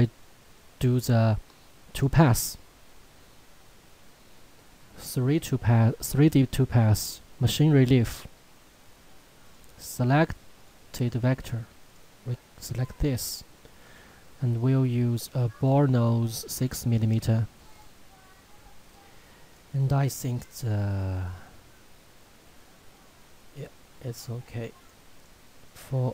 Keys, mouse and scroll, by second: 1.9 click, 7.7 click, 23.5 click.